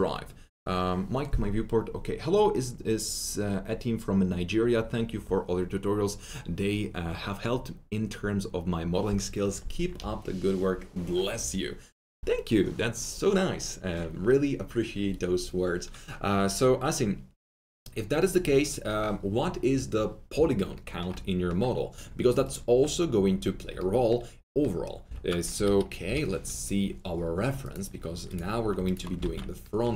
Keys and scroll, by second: 25.0-26.5 typing, 29.2 ctrl+alt+q.